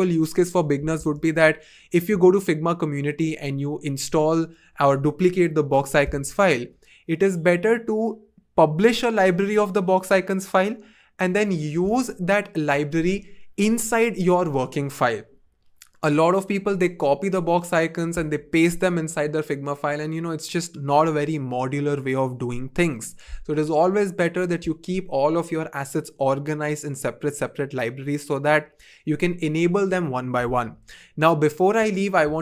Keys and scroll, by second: 1.7 super+x.